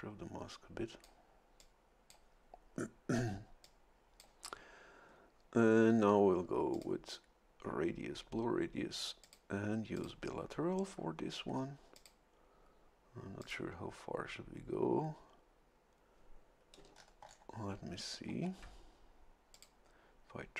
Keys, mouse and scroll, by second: 1.6 click, 3.6 click, 6.7 click, 9.2 click, 9.9 click, 11.9 click, 13.4 click, 16.8 a, 16.9-17.2 scroll down 1, 18.3 scroll down 1, 19.5 click.